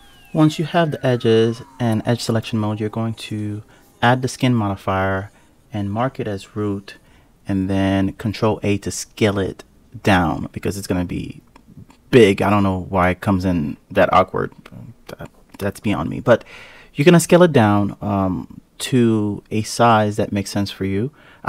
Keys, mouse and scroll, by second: 0.1-1.1 scroll down 7, 1.1-2.3 scroll up 2, 2.3 ctrl+a, 6.0-8.0 scroll up 17, 8.0 ctrl+a, 9.9-11.1 scroll down 17, 11.1-11.9 scroll up 3, 11.9 scroll up 1, 12.1-12.7 scroll down 1, 13.1-14.1 scroll up 2, 14.1 ctrl+a, 17.2 click, 17.9 click, 18.6 click, 19.0 click, 19.6-21.4 drag.